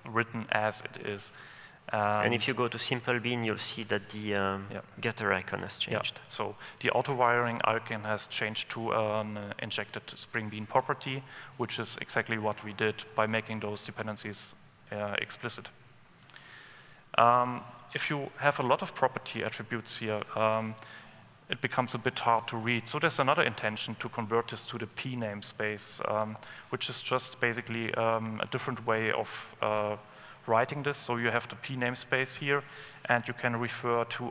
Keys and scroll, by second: 20.3 alt+Return, 33.4 ctrl+space.